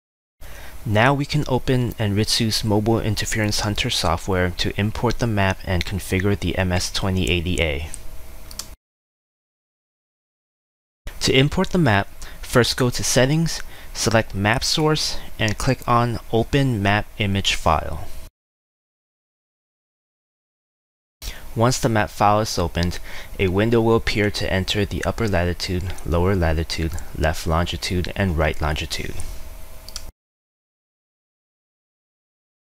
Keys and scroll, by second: 0.0-1.7 typing, 25.4 ctrl+c, 26.0 ctrl+v, 28.0 ctrl+c, 28.5 ctrl+v, 30.8 ctrl+c, 31.3 ctrl+v.